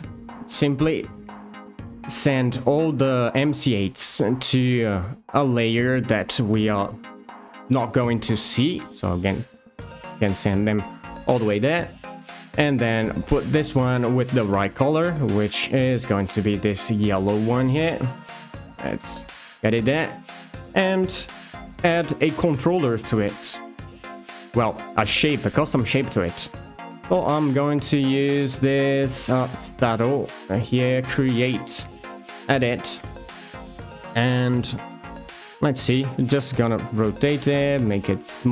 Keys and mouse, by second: 0.5 shift+middle drag, 4.7 ctrl+f, 6.9 Return, 9.0 click, 10.4 shift+middle drag, 15.6 shift+click, 19.1 click, 20.0 click, 25.8 click, 26.7-29.6 drag, 32.2 click, 34.1 shift+middle click, 35.7 r, 36.8 click, 37.2 s, 37.9 click.